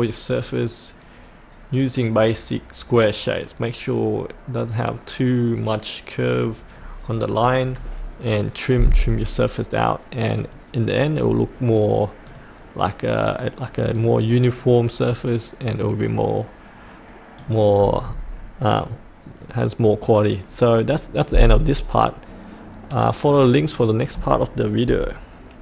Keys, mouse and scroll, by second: 0.3 click, 11.2-11.5 scroll up 1, 11.5-12.2 scroll down 1, 12.2 click.